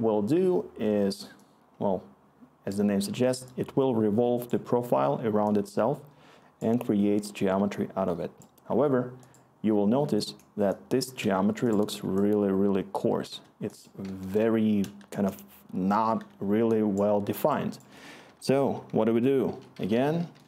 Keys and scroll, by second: 3.7-4.2 scroll, 14.2-16.3 Return, 18.2 Tab, 18.8-20.4 typing.